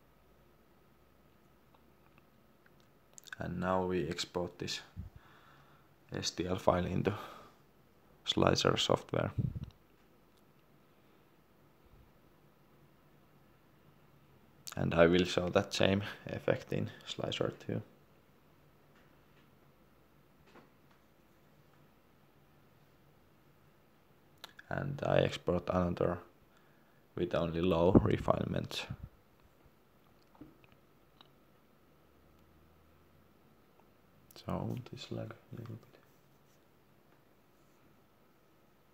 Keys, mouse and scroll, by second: 2.6 scroll up 1, 4.0 click.